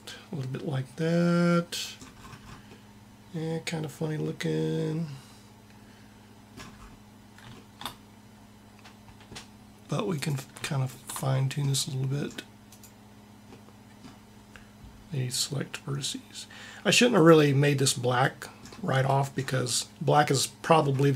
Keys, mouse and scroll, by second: 6.4-7.4 middle drag, 10.0-13.2 drag, 17.0-18.8 drag.